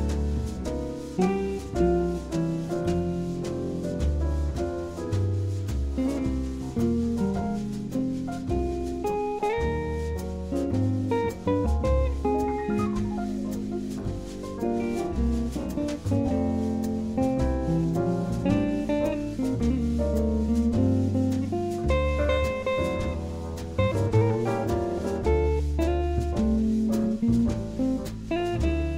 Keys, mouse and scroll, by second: 0.1-2.1 drag, 2.8 ctrl+z, 4.7-6.6 drag, 7.5-9.3 drag, 9.8-11.7 drag, 12.6 ctrl+z, 14.0-15.8 drag, 16.8-18.5 drag, 18.5 ctrl+z, 19.7 g, 22.0-23.7 drag, 24.2-25.9 right drag, 24.7-26.4 drag, 26.2 s.